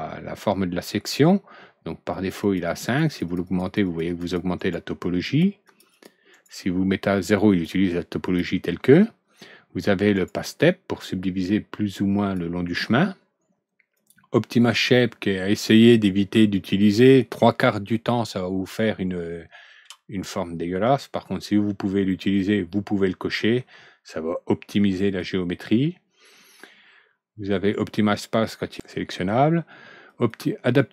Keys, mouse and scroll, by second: 2.1 click, 2.3 click, 2.6 click, 2.8 click, 3.0 click, 3.2 click, 3.4 click, 3.8 click, 4.0 click, 4.3 click, 4.5 right click, 5.2 click, 5.6 click, 5.9 click, 6.3 right click, 7.5 click, 8.2 click, 10.1 right click, 10.5-12.3 drag, 13.9 click, 20.8 alt+Right, 20.9-23.5 middle drag, 25.0 click, 30.0 click.